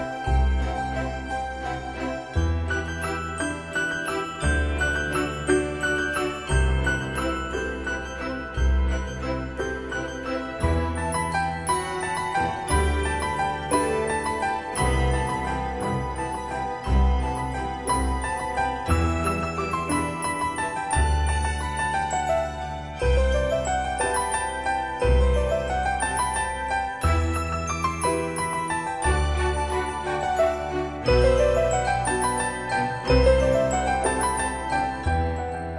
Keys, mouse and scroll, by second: 11.8 click, 13.3 middle click, 15.1 click, 26.5-27.2 scroll up 1, 27.2 click, 28.2-28.6 scroll up 1, 29.6 click, 32.0-32.7 scroll down 1, 32.7-33.5 scroll up 1, 33.5 click, 34.9 Escape.